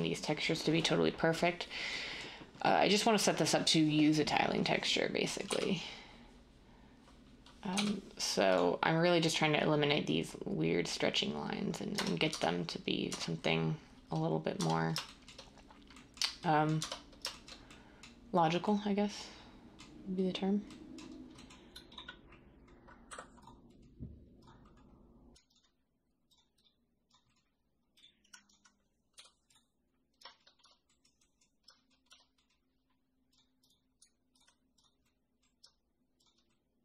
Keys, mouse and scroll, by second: 5.4 u, 7.7 u, 12.2 Tab, 13.0 Tab, 14.5 Tab, 16.7 Tab, 23.0 u, 30.6 Tab, 32.0 Tab.